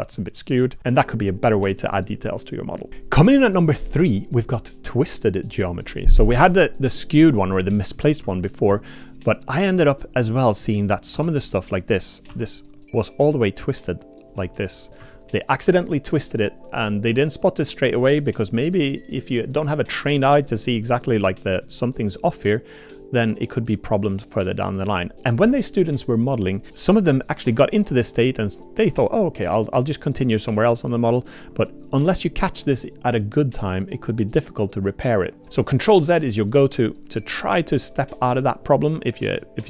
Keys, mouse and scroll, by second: 0.1 middle click, 6.9 middle click, 7.7 shift+middle click, 8.2 Tab, 8.7 Tab, 10.0 click, 10.2 middle click, 11.1 3, 11.3 click, 12.3 r, 15.0 Tab, 17.2 middle click, 17.3-17.7 drag, 17.7 middle click, 21.1 middle click, 22.1 click, 22.2 middle click, 22.3 click, 22.4-24.1 middle drag, 24.5 middle click, 35.4 ctrl+z, 39.1 middle click.